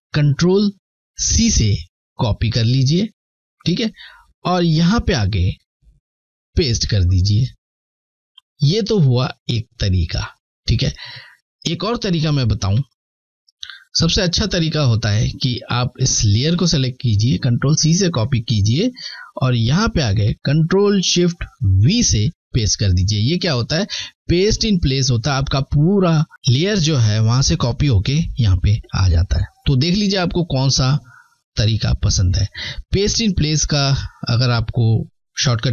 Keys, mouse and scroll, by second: 0.5 c, 3.8 click, 5.8 ctrl+v, 11.8 Delete, 13.6 click, 17.2 c, 18.1 click, 20.6-21.1 typing, 28.1 Left, 28.1 click.